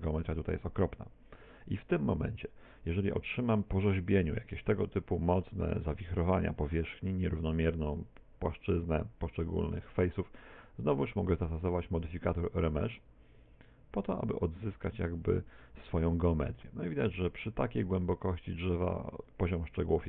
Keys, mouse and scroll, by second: 1.7 Tab, 2.2 middle click, 3.6 middle click, 5.9 middle click, 8.0 middle click, 11.4 click, 19.2 click.